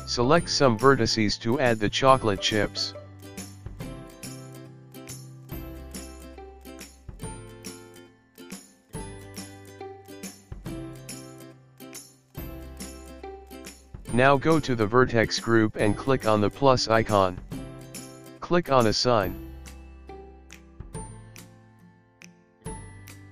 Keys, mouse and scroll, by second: 4.6-5.4 Tab, 7.4 shift+click, 8.8 shift+click, 13.7 click, 15.5 click, 17.2 click, 18.8 click, 19.8 click, 20.6 click, 22.1 Tab, 22.7 click.